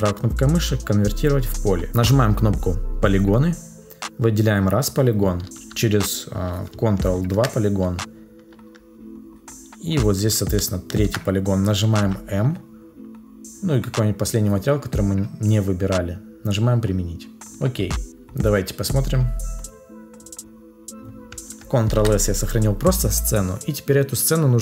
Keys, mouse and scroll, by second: 7.1 ctrl+click, 10.7 ctrl+click, 21.9 ctrl+s.